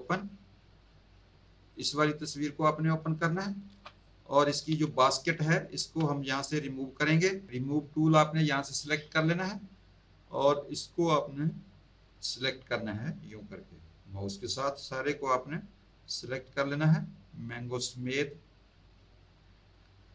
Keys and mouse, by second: 1.7 click, 3.6 z, 3.9 click, 4.8 z, 5.0 alt+click, 8.8 click, 10.7 click.